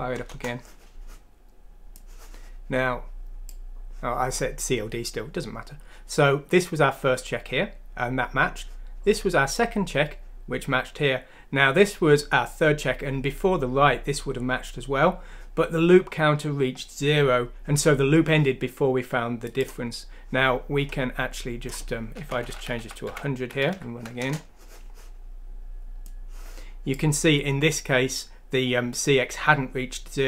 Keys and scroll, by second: 0.2 Return, 22.2-23.0 typing, 23.7 F6, 24.1 Return, 24.8 typing.